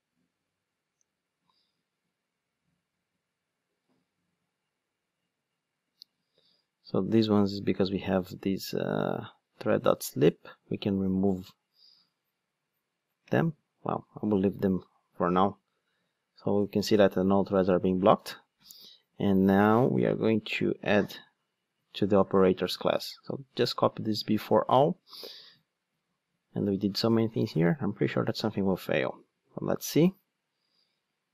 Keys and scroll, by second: 9.7 super+x, 20.7 ctrl+Tab, 25.1 super+c, 28.0 Tab, 28.7 Tab, 30.9 super+v.